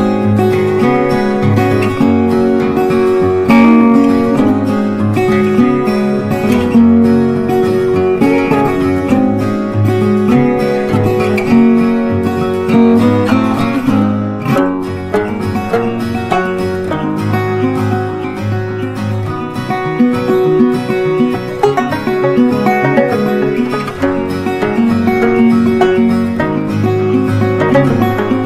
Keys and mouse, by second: 0.1 g, 1.4-17.7 drag, 17.7 right click, 18.7 click, 21.6 g, 23.0-28.4 drag.